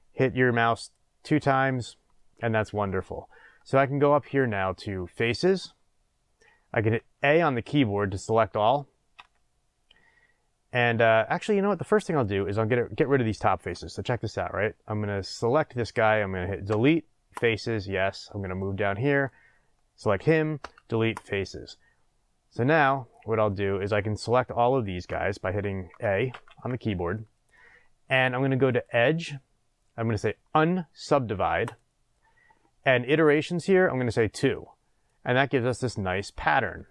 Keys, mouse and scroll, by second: 0.7 middle click, 0.9 click, 5.3 click, 9.1 a, 12.3 click, 15.1 click, 15.5 click, 16.6 Delete, 17.9-19.1 middle drag, 19.1 click, 20.6 Delete, 21.7-28.7 middle drag, 26.3 a, 28.7-36.9 drag.